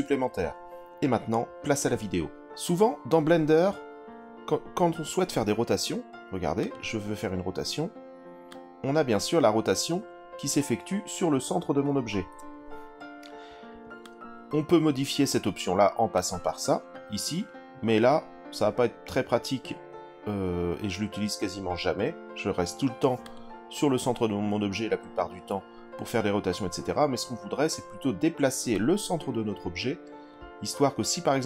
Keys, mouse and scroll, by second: 6.6 click, 8.5 click, 12.2 ctrl+z, 14.0 click, 16.1-23.2 drag, 28.7-30.3 drag.